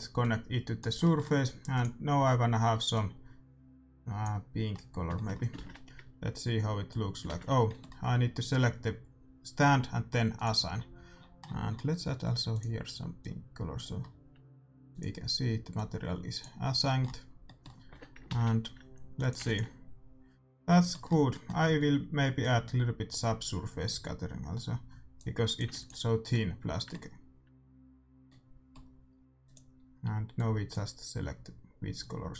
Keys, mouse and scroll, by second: 0.2-3.6 drag, 1.0-3.4 middle drag, 4.7-5.9 middle drag, 5.6 shift+z, 7.3 shift+z, 10.3-12.1 drag, 12.5-14.2 drag, 14.8-16.6 drag, 16.8 middle click, 17.8 Tab, 18.3 shift+z, 19.2-21.2 drag, 19.5 ctrl+s, 20.6 middle click, 21.9-25.4 middle drag, 22.3-27.4 drag, 25.7 ctrl+s, 26.3-27.4 middle drag, 29.4-31.3 drag.